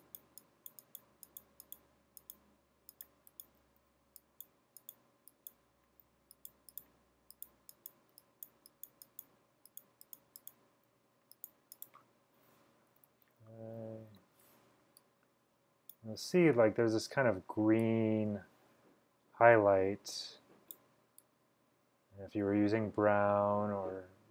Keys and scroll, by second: 3.9 x, 6.1 x, 8.2 x, 11.0 x, 13.0-14.2 typing, 16.8-17.5 typing.